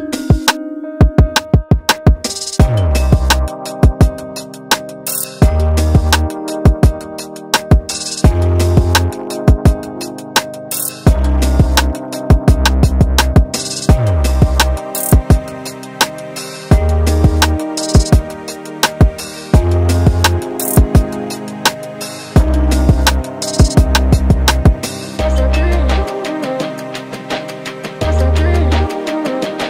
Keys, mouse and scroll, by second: 0.6-3.5 middle drag, 5.2-5.9 scroll down 2, 5.9 shift+middle click, 6.2 scroll down 1, 6.3-9.4 middle drag, 9.4-9.8 scroll down 2, 9.8-11.5 middle drag, 11.5-11.9 scroll up 1, 11.9-13.4 middle drag, 13.4 KP_1, 14.1-15.1 scroll up 4, 15.1 shift+middle click, 15.4 click, 15.6 Tab, 15.8-18.2 scroll up 2, 18.3 middle click, 19.0-19.3 scroll down 1, 19.3-20.8 shift+middle drag, 20.8 click, 21.5 e, 23.4 click, 24.4 click, 28.1-28.5 scroll down 1, 28.5 alt+a, 28.8 Tab, 29.2 alt+a, 29.4-29.6 middle drag.